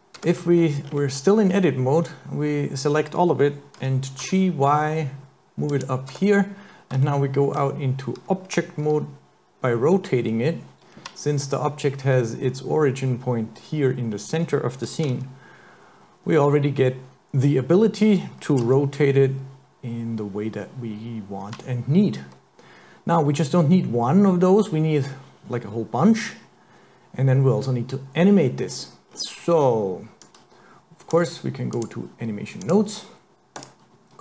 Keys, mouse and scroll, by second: 0.2 Tab, 0.6-1.5 scroll up 5, 1.5-2.1 scroll down 1, 2.1-2.6 scroll down 2, 3.8 g, 6.1 Tab, 7.1 shift+middle click, 8.9 r, 15.1 r, 18.7 r, 28.3-28.7 scroll down 4, 28.7-29.1 scroll up 4, 29.1-30.2 scroll down 2, 30.2 click, 31.7 click, 33.6 click.